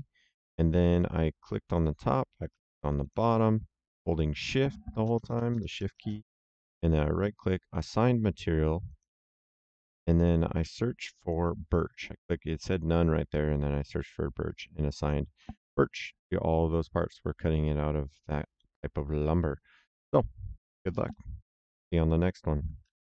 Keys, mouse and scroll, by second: 0.8 click, 2.9 shift+click, 6.8 right click, 8.8 click, 10.7 click, 14.9 click, 16.7 middle click, 18.5 middle click, 22.7 ctrl+shift+l.